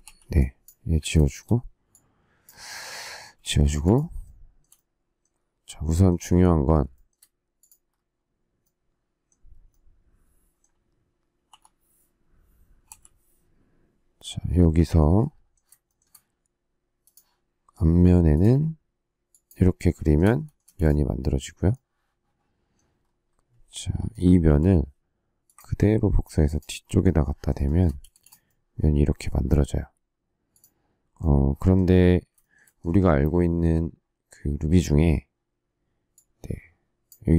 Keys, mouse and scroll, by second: 0.0 e, 1.2 shift+middle click, 3.1 space, 4.2 shift+middle click, 6.9 shift+middle click, 11.4 l, 13.0 m, 15.8 shift+middle click, 19.9 shift+middle click, 20.6 space, 24.4 m, 25.5 ctrl+click, 27.6 shift+middle click, 28.0 space, 32.3 shift+middle click.